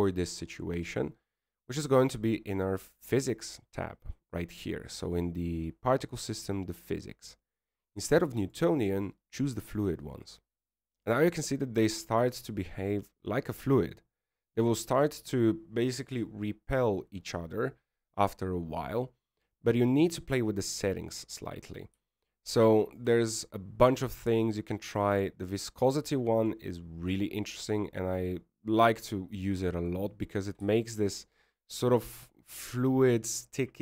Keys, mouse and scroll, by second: 2.4-2.9 scroll up 1, 2.9-3.3 scroll up 2, 3.3 scroll down 1, 3.4-5.1 scroll down 2, 5.1 click, 5.1-5.5 scroll down 2, 6.1-8.1 scroll down 4, 10.5 click, 13.2 middle click, 21.4 click, 25.5 click, 29.7 middle click, 31.7 middle click, 32.8 shift+middle click, 33.2 shift+middle click.